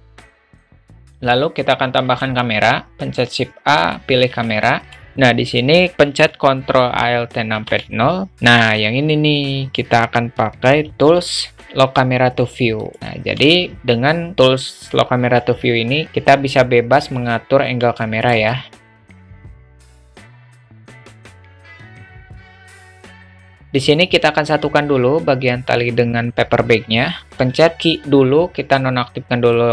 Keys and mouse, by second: 0.2 alt+shift+middle drag, 2.5 shift+a, 4.9 alt+middle click, 7.6 ctrl+alt+KP_0, 11.0 q, 18.0-19.5 middle drag, 19.6 alt+shift+middle click, 21.1 click, 21.6 click, 21.8 ctrl+z, 22.4 a, 23.3 q, 27.5 q.